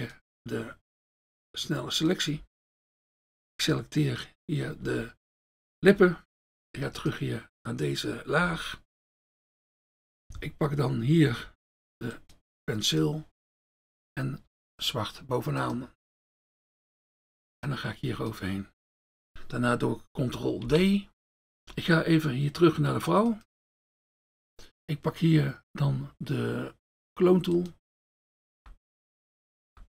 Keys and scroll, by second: 2.5 F1, 5.9 F1, 8.4 F1, 13.4 F1, 16.9 F1, 20.7 ctrl+d, 28.6 F1, 29.7 F1.